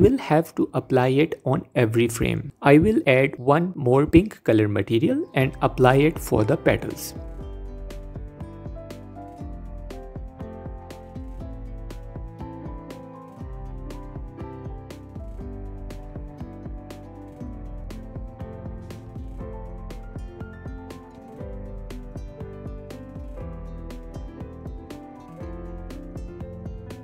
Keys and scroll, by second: 2.7 Tab, 6.0 Tab, 6.3 Tab, 11.2 Tab, 13.4 Tab, 15.4 Tab, 17.6 Tab, 19.6 Tab, 21.6 Tab.